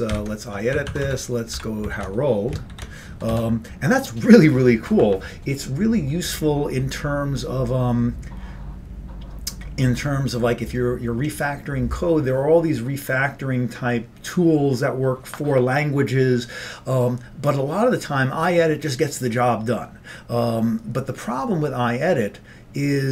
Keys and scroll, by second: 0.2 ctrl+;, 0.8 Right, 0.9 Right, 1.1 Right, 1.7 o, 2.1 ctrl+d, 2.7 ctrl+g, 3.2 Down, 3.4 Down.